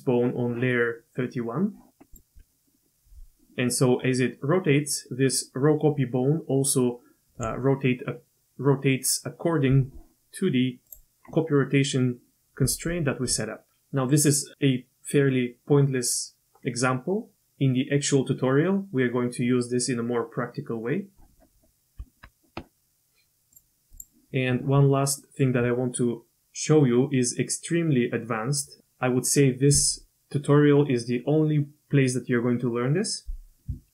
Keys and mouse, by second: 2.1 click, 2.4 g, 22.0 Tab, 23.9 click, 25.2 click.